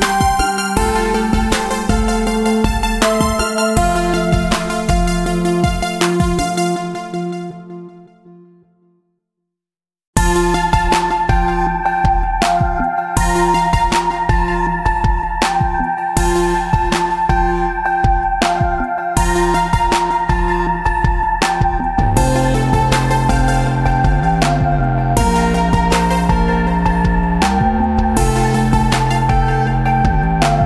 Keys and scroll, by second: 6.8 Tab, 8.3 space, 10.9 space, 17.1 ctrl+v, 21.9 ctrl+z, 29.2 Tab, 29.6 space.